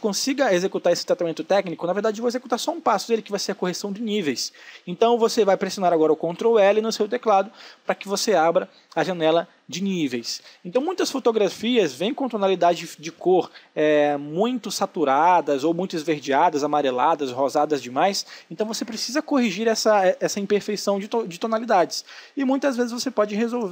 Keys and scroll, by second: 5.8 ctrl+l.